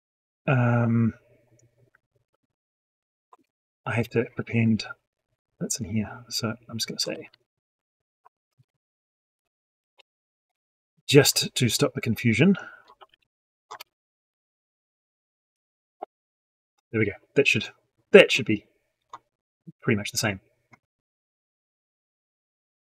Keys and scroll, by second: 6.9 ctrl+c, 8.2 ctrl+v, 12.8 ctrl+c, 13.6 ctrl+v, 14.2 ctrl+z, 15.2 ctrl+v.